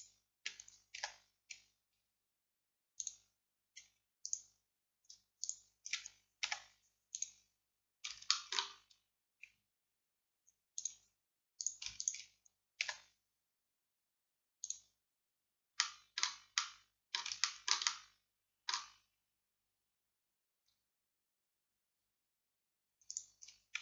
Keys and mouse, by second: 1.1 x, 4.2 middle click, 4.3-9.7 drag, 6.5 x, 11.7-12.9 middle drag, 12.9 x, 20.6-22.8 drag, 23.2-23.8 drag.